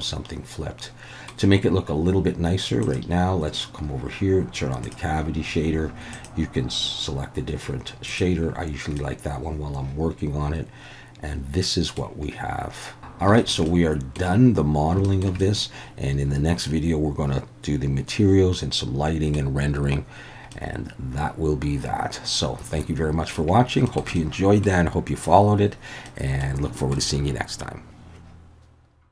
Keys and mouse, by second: 2.9-8.5 drag, 9.0-12.0 middle drag, 13.1 ctrl+z, 13.1 alt+a, 13.4 shift+middle click, 13.7-14.2 middle drag, 15.1 shift+middle click, 15.4-19.4 middle drag, 20.5-23.4 middle drag, 23.9 shift+middle click, 24.2 middle click, 26.1 middle click, 26.8 shift+middle click.